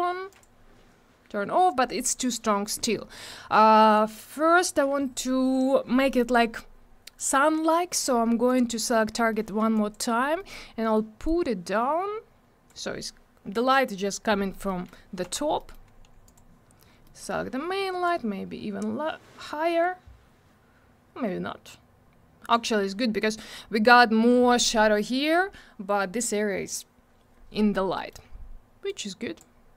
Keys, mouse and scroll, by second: 0.3 click, 7.7 scroll up 1, 8.5 click, 9.0 scroll down 1, 9.4 middle click, 9.7 alt+click, 9.9 alt+double click, 10.2 scroll down 1, 10.3 middle click, 10.5 middle click, 11.2 click, 14.6 middle click, 15.2 g, 15.6 middle click, 15.8 scroll up 1, 16.2 click, 16.8 scroll down 1, 17.0 middle click, 18.0 click, 27.9 middle click, 28.2 scroll up 1, 28.8 click.